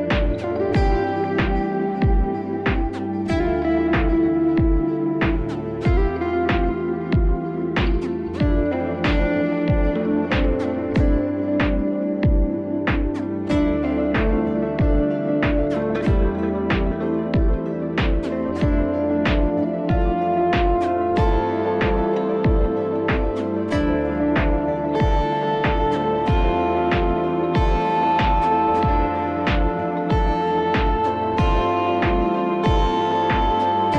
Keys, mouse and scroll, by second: 0.4 click, 2.1 click, 4.5 click, 5.8 click, 9.8 click, 11.4 ], 12.8 click, 14.5 click, 16.6 click, 17.8 click, 21.0 click, 22.5 click, 23.7 click, 24.5 click, 25.6 click, 25.9 click, 27.1 click, 28.2 click, 29.6 click, 30.1 click, 30.9 click, 32.2 click, 33.8 ].